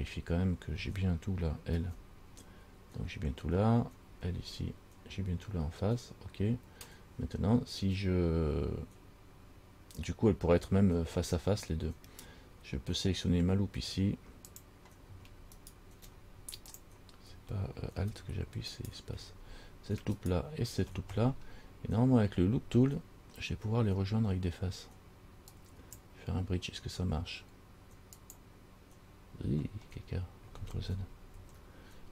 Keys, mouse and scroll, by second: 2.0 l, 4.3 l, 9.8-10.8 scroll up 1, 14.7 click, 15.3 space, 15.8 space, 19.0 alt+right click, 20.4 alt+shift+right click, 21.4-22.1 scroll down 4, 25.7 click, 28.4 click, 30.0 scroll down 2, 31.6 ctrl+z.